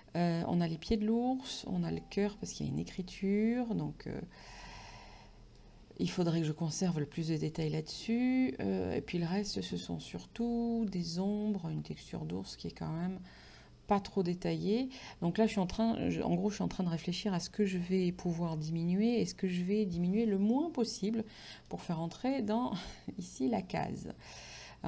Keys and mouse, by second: 21.7 click.